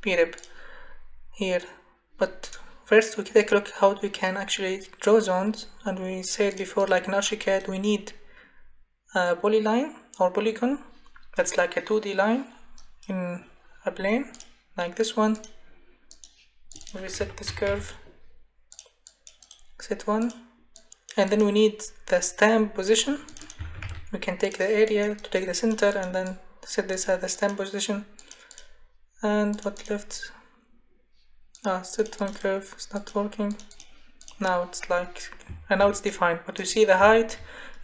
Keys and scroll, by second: 17.0-18.2 typing, 23.4-24.3 typing.